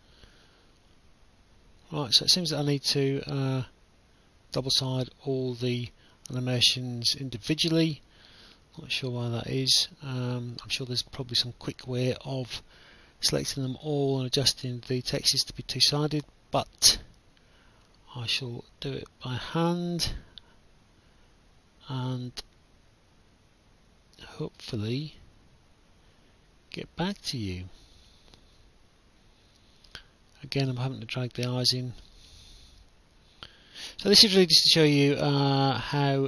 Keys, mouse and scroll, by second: 1.2 click, 2.2 right click, 3.9 click, 5.2 click, 6.2 click, 6.9 click, 9.7 click, 10.7 right click, 10.9 w, 11.3 a, 16.7 click, 17.5 right click, 18.2 click, 20.6 click, 22.2 right click, 25.5 click, 26.8 click, 29.2 click, 30.9 click, 32.8 click, 33.9 click, 35.0 click.